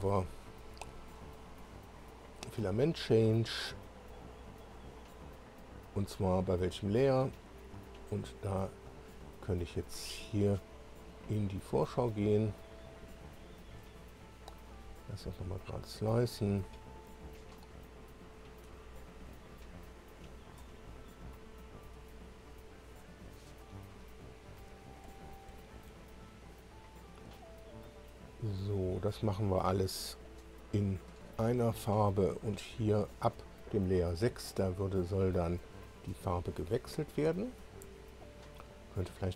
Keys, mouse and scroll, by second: 2.5 click, 8.8 click, 9.9 click, 14.6 click, 18.4-20.7 drag, 21.6-23.1 drag, 23.4 click, 24.6 Up, 25.1 Up, 25.9 Up, 26.0 Up, 31.9 Up, 37.8 Down.